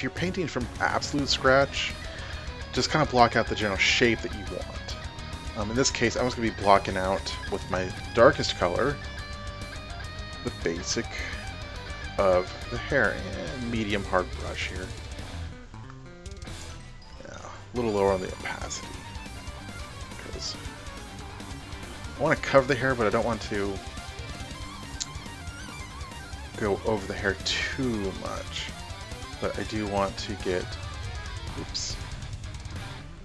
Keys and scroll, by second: 32.0 ctrl+alt+z.